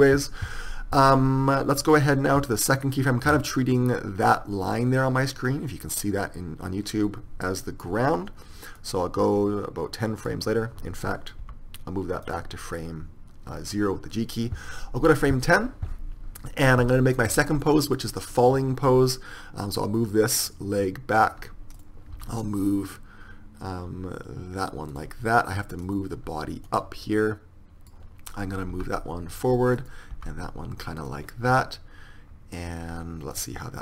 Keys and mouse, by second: 0.0 KP_3, 9.0 click, 11.9 g, 18.1 click, 18.4-20.5 right drag, 19.2 r, 22.0-24.2 right drag, 22.4 r, 26.1-30.4 drag, 26.9-28.0 right drag, 28.5 right click, 28.9 r, 30.4 r.